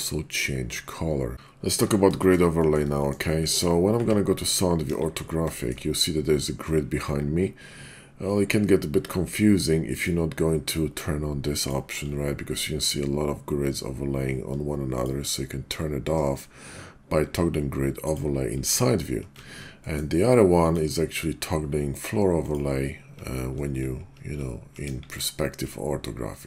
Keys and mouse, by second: 1.3 KP_5, 2.2 shift+middle click, 2.5 middle click, 3.2 middle click, 3.9 `, 4.8 KP_5, 6.5 `, 9.9-11.8 drag, 14.9-18.3 drag, 19.8 middle drag, 20.6-22.6 drag, 24.8 KP_5.